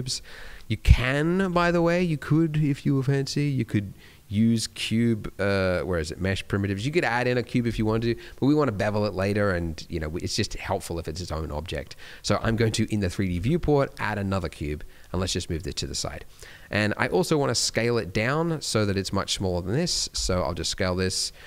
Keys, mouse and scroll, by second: 1.4 shift+a, 12.3 shift+a, 13.3 shift+a, 14.6 scroll down 2, 15.0 g, 15.9-16.3 scroll up 1, 16.3 middle click, 17.1 shift+middle click, 18.4 middle click, 19.3 middle click, 20.1 s.